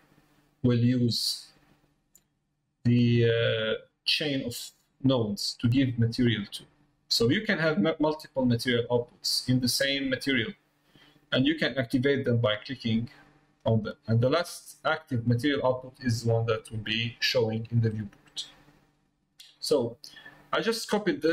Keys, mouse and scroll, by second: 0.9 middle click, 3.5 middle click, 9.8 middle click, 11.7 click, 17.9 middle click, 19.9 middle click, 20.9 click.